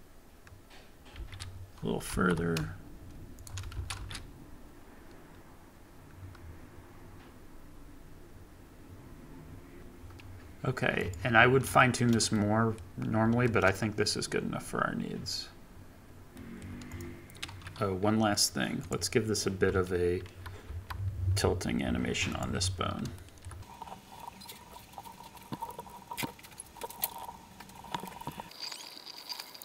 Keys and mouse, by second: 1.1 space, 2.1 g, 2.6 y, 3.4 shift+click, 3.7 shift+Left, 4.0 space, 10.5-11.0 middle drag, 11.0 middle click, 12.7-13.4 middle drag, 16.6 shift+middle drag, 17.0-19.7 middle drag, 21.9 ctrl+Tab, 23.1 shift+middle drag, 24.7 g, 24.9 Escape, 25.6 shift+Left, 25.8 i, 26.0 Right, 26.2 g, 26.5 z, 26.8 i, 27.0 ctrl+Tab, 27.2 ctrl+Tab, 27.5 click, 28.0 ctrl+c, 28.0 ctrl+v, 28.5 g, 28.5 z, 28.5 click, 28.6 ctrl+c, 28.6 Right, 28.6 ctrl+v, 28.6 Right, 28.7 ctrl+c, 28.8 space, 28.8 ctrl+Tab, 29.0 ctrl+Tab, 29.1 Right, 29.1 ctrl+c, 29.3 ctrl+c, 29.3 ctrl+v, 29.3 ctrl+z.